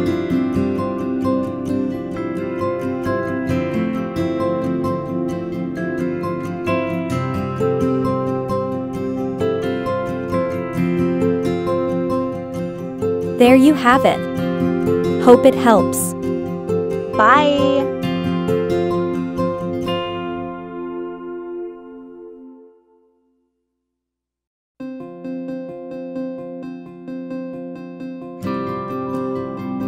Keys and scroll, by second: 3.2 Down, 3.6 Left, 4.2 Left, 4.5 Up, 5.0 Left, 5.3 Left, 13.0-14.0 Up, 14.0 Right, 14.2 Right, 14.7 Left, 15.3 Left, 15.8 Up, 17.0 Left, 17.7 Right, 18.2 Right, 19.2 Left, 19.7 Left, 21.0 Up, 21.7 Down, 22.0 Up.